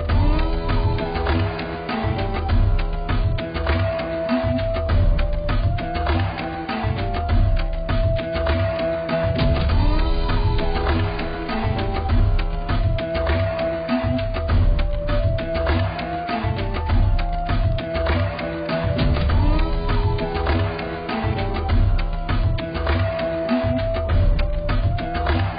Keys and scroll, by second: 8.5 ctrl+0.